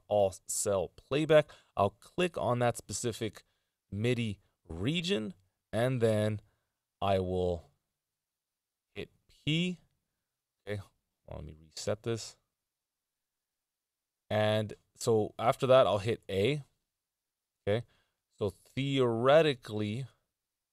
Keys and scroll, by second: 7.5 p, 16.6 a.